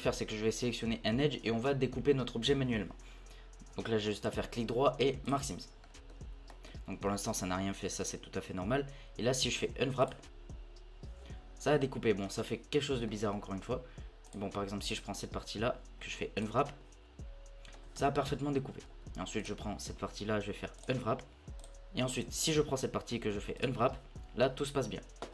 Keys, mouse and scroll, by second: 0.0 scroll up 3, 4.2-5.8 right drag, 5.8-7.9 middle drag, 7.9 l, 9.5 u, 12.2 scroll down 2, 12.2 scroll up 1, 13.1-14.2 middle drag, 14.2-14.9 drag, 16.0 u, 17.7 scroll up 2, 18.0 Tab, 18.6 Tab, 18.9 scroll down 1, 19.4 alt+click, 20.3 u, 21.6-23.2 alt+drag, 23.2 u.